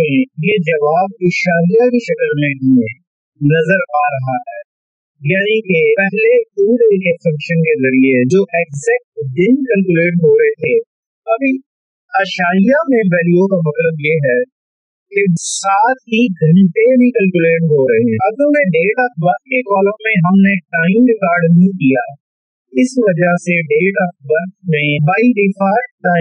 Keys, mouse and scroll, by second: 0.0-2.0 typing, 2.4 Left, 3.1 Return, 3.8 Up, 4.7 ctrl+1, 6.0 click, 6.9 click, 7.2 Left, 7.8 Right, 8.8 shift+Right, 12.3-16.6 drag, 16.6-24.6 drag.